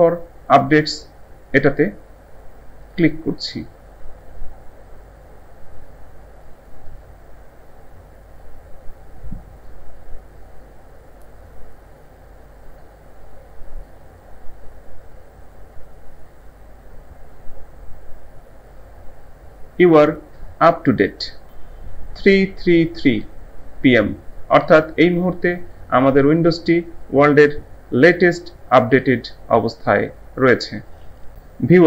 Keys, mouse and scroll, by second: 2.8 click.